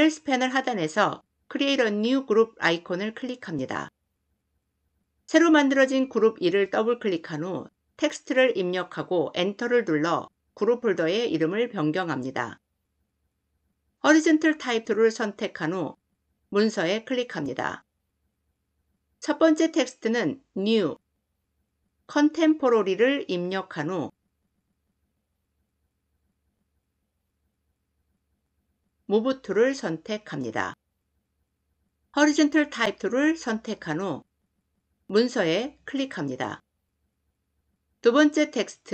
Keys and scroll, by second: 9.0 Return, 9.6 Return, 13.9 t, 28.8 v, 32.2 t.